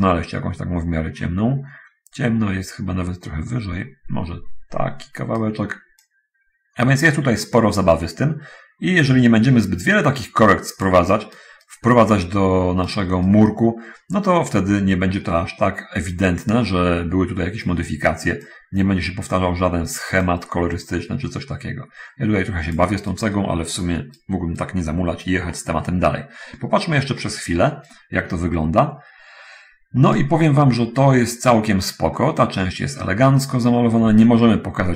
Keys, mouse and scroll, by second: 6.3-10.9 drag, 11.3 right click, 11.9-13.3 right drag, 13.5-18.1 right drag, 18.3-20.3 drag, 20.5-22.9 drag, 23.2-24.3 right drag, 24.5-25.7 right drag, 25.8 middle click, 26.7-27.0 scroll down 1, 27.3 middle click, 28.2-30.4 right drag, 31.0 scroll up 1, 31.8 scroll up 1, 32.3-33.3 middle drag.